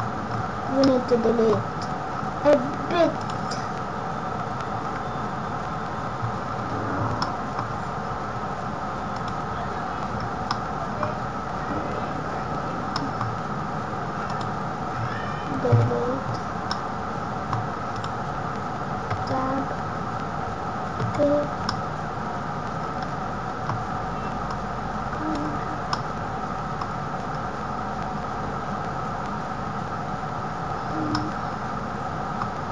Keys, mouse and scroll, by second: 0.1-0.5 scroll down 5, 0.4 scroll up 7, 0.8 middle click, 1.5 scroll up 1, 2.1 scroll down 4, 2.5-3.1 scroll up 5, 3.1 click, 6.4 scroll down 6, 6.9 scroll up 3, 7.2 middle click, 7.6 scroll down 2, 8.0 scroll up 3, 10.1-10.4 scroll down 4, 10.4 middle click, 11.1-11.4 scroll up 5, 12.9 middle click, 12.9 scroll down 2, 13.7 scroll up 1, 16.6 middle click, 19.1 Tab, 19.7 scroll up 2, 20.1 scroll down 1, 20.6 scroll down 1, 20.9 a, 21.6 middle click, 27.3 scroll up 1, 30.6 scroll down 1, 30.9 scroll up 1, 31.1 middle click.